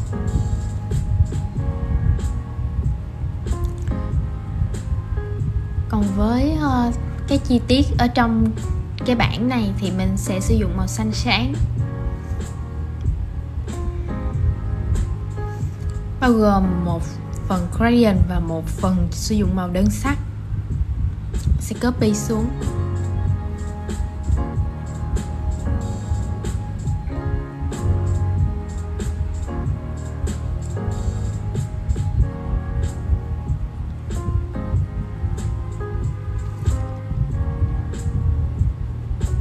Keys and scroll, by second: 16.6 super+g, 28.3 super+c, 29.1 shift+super+v.